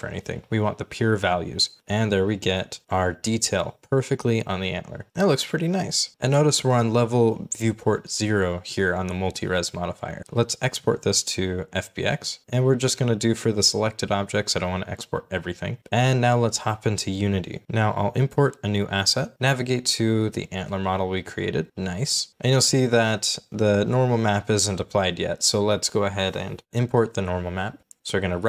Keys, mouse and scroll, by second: 0.9 g, 1.1 y, 9.3 right click, 17.6 Delete, 18.5 right click, 20.9-21.6 scroll up 1, 24.6 middle click, 25.7 right click, 27.1-27.6 scroll down 1, 27.6 scroll up 1, 27.7 d, 28.0 right click.